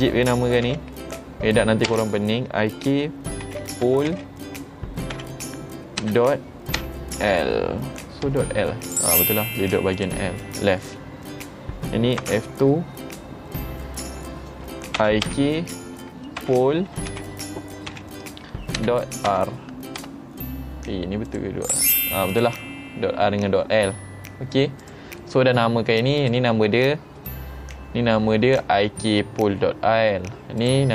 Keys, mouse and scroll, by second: 10.0 click, 10.5 middle click, 12.3 F2, 21.3 click, 22.4 click, 24.9 click, 25.3 middle click, 26.3 click, 30.7 click.